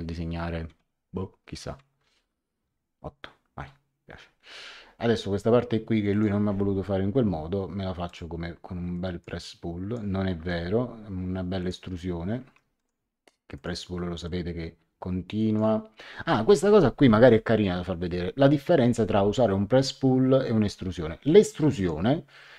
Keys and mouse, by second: 0.8 KP_6, 2.0 shift+Home, 2.6 KP_8, 3.6 Return, 3.6 KP_Enter, 6.1 click, 8.0 click, 11.6 click, 12.4 Escape, 12.7 click, 16.1 Escape, 21.7 click.